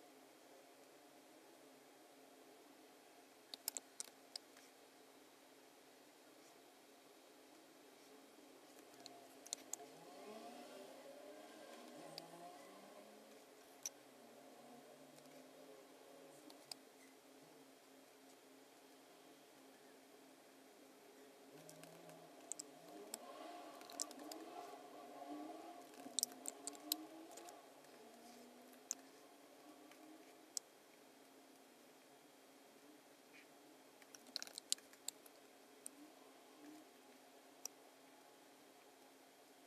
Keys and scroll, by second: 3.5 space, 3.9 alt+super+g, 4.0 space, 9.0 BackSpace, 9.5 space, 11.8 space, 16.4 space, 22.8 space, 23.7 super+=, 24.0 space, 26.0 super+-, 26.7 space, 27.5 alt+v, 34.6 super+=, 34.7 space.